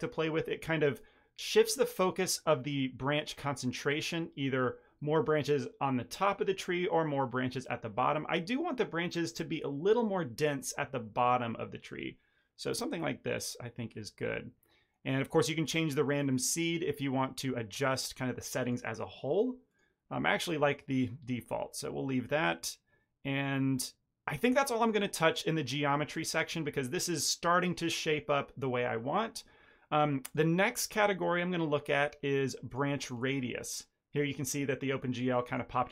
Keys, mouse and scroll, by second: 16.0 click, 18.5 click, 30.2 click, 35.3 middle click, 35.6 shift+middle click.